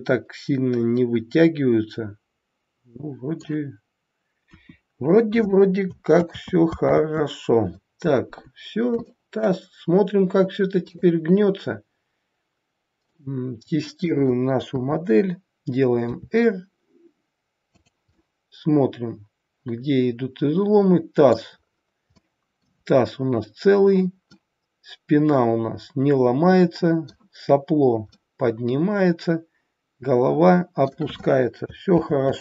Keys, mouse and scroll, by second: 6.1 ctrl+z, 6.9 ctrl+z, 8.6 scroll down 2, 9.0 shift+middle click, 10.9 click, 12.5-13.1 scroll down 1, 13.1 middle click, 14.6 KP_3, 16.0 r, 18.0 middle click, 21.6-22.3 scroll up 3, 22.1 middle click, 23.5-24.2 scroll down 1, 24.2 scroll down 2, 24.3 middle click.